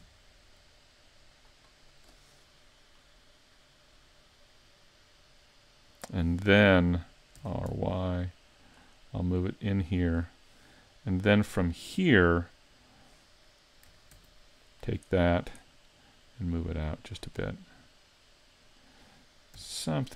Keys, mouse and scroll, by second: 1.8 right click, 2.4 middle click, 7.4 r, 9.4 click, 10.5-10.8 scroll down 3, 10.9 middle click, 13.5 scroll up 2, 14.1 ctrl+r, 15.4 click, 16.0 click, 17.5 middle click, 19.6 r.